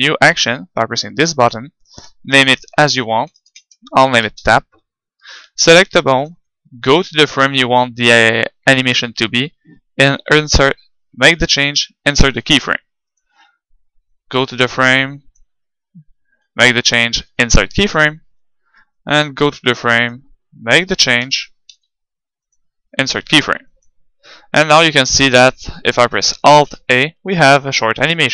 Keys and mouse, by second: 0.4-2.1 drag, 2.6-4.5 drag, 6.1-7.8 middle drag, 12.2 i, 14.2-15.9 drag, 17.3 i, 19.1-20.8 drag, 21.3 g, 22.5-24.3 drag, 23.3 i, 24.8-26.6 drag, 26.6 alt+a.